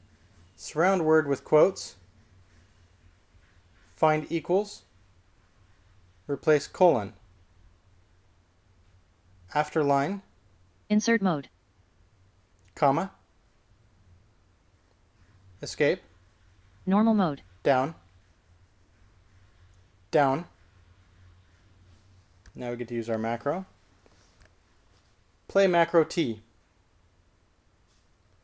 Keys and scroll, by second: 2.8 typing, 5.4-6.1 typing, 7.6-8.3 typing, 11.0 shift+a, 14.0 ,, 16.9 Escape, 21.3 j, 27.2 typing.